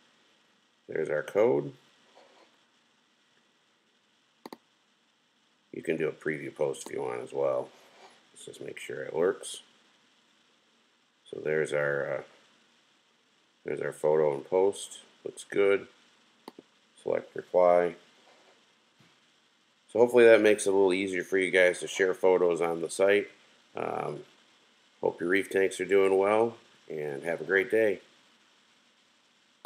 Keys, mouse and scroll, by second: 16.4 click.